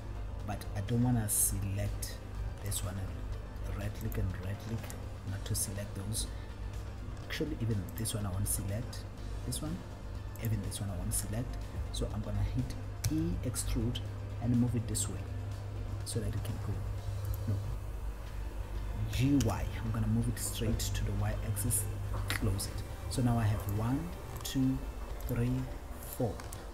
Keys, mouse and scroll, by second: 2.8 shift+click, 4.3 shift+click, 8.1 shift+click, 10.5 shift+click, 13.3 e, 19.3 right click, 19.8 g, 21.9 click, 21.9 y, 23.8 click, 24.7 shift+click, 25.7 click, 26.4 shift+click.